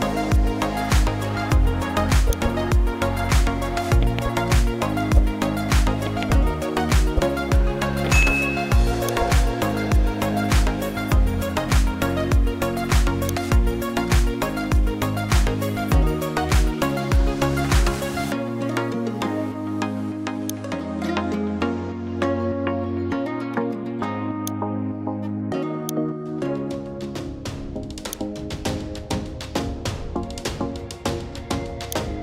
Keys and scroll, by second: 11.1-12.8 typing.